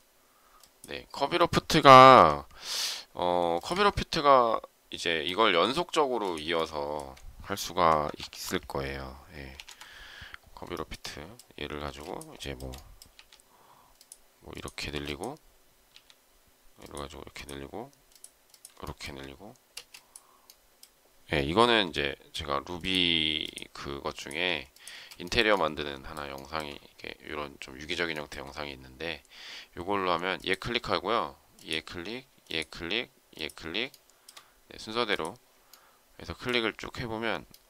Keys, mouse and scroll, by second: 2.1 m, 4.9 shift+scroll down 1, 5.2 shift+middle click, 6.3 shift+click, 6.5 shift+middle click, 6.7 shift+scroll down 1, 6.9 shift+scroll up 1, 8.1 shift+8, 9.5 3, 9.6 Return, 10.6 shift+middle click, 11.8 space, 12.3 shift+middle click, 12.5 shift+double middle click, 13.0 s, 14.8 space, 15.8 s, 18.8 shift+middle click, 18.9 shift+double middle click, 19.7 space, 24.8 space, 25.2 shift+middle click, 26.3 shift+middle click, 28.0 shift+middle click, 33.8 shift+middle click, 35.6 shift+middle click, 37.4 shift+middle click.